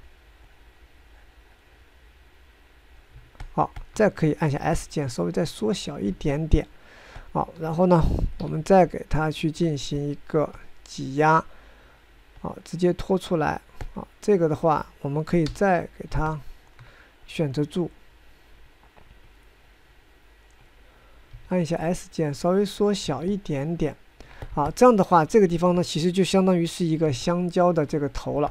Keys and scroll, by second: 5.3 s, 9.1 1, 16.1 s, 22.0 s.